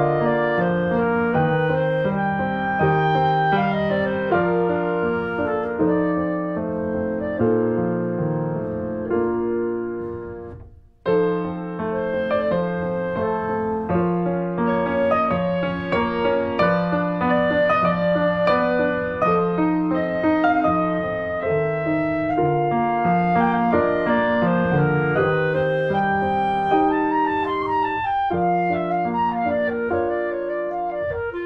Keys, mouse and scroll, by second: 0.0 shift+middle click, 0.4 alt+z, 0.6 Tab, 1.6 1, 2.0 click, 2.2 shift+middle click, 2.6-4.3 drag, 4.8-9.1 drag, 9.5 scroll down 1, 9.6 middle click, 9.9 Tab, 10.0 click, 10.1-10.6 scroll down 2, 10.3 middle click, 10.6 shift+middle click, 10.7 shift+scroll up 1, 10.8 click, 10.9 scroll down 2, 11.1 shift+middle click, 11.4 scroll up 1, 11.5 middle click, 11.8 alt+z, 12.1 middle click, 12.2 scroll up 1, 12.3 click, 12.5 shift+middle click, 13.0 ctrl+s, 13.1 click, 13.3 shift+middle click, 14.3 Tab, 14.5 shift+middle click, 14.8 scroll up 1, 15.1 middle click, 15.5 click, 15.8 shift+middle click, 16.5 Tab, 16.7 scroll down 1, 16.9 middle click, 17.0 Tab, 17.3 scroll down 1, 17.5 middle click, 18.2 Tab, 18.4 middle click, 18.7 Tab, 18.8-19.3 scroll up 3, 19.3 click, 19.5 middle click, 20.8 scroll down 1, 21.2 click, 22.0 shift+middle click, 22.6 ctrl+shift+b, 23.7 Tab, 24.4 Tab, 25.1 click, 25.3-25.7 scroll up 1, 25.7-27.2 drag, 27.2 shift+middle click, 28.0 ctrl+shift+b, 30.7 click, 30.9-31.2 scroll up 2, 31.2-31.4 drag.